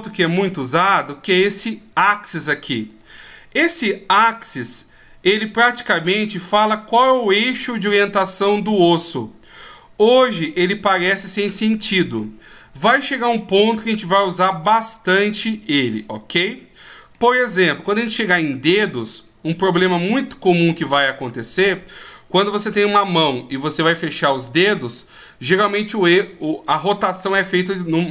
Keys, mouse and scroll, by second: 2.9 click, 3.8 middle click, 8.1 middle click, 10.9-11.3 scroll up 2, 11.6-12.2 scroll down 1, 12.2 middle click, 17.2 middle click.